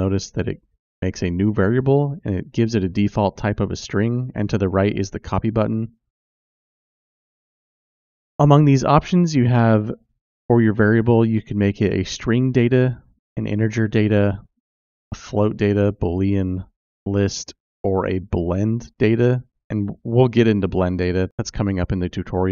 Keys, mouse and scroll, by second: 1.9-22.5 drag.